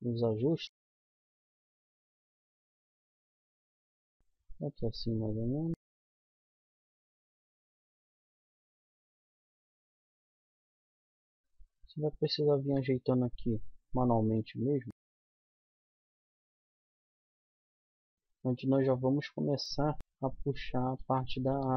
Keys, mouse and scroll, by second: 0.3-1.6 drag, 0.8 c, 2.1 right click, 2.3 g, 3.2 middle click, 3.9 a, 4.1 c, 5.2 click, 5.7-11.4 typing, 7.0 click, 8.5 click, 9.2 middle click, 12.5-14.9 drag, 12.7 g, 14.3-16.5 typing, 17.0-18.2 middle drag, 17.7 z, 18.7 z, 20.1 c, 20.7-21.7 drag, 20.9 a, 21.4 c.